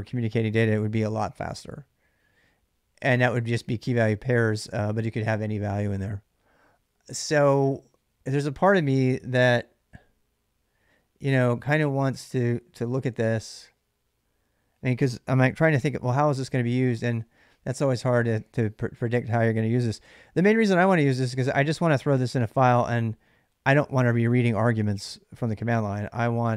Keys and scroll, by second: 15.4 ctrl+a, 15.6 ctrl+a, 16.9 ctrl+[, 17.0 j, 17.2 j, 19.6 k, 19.9 k.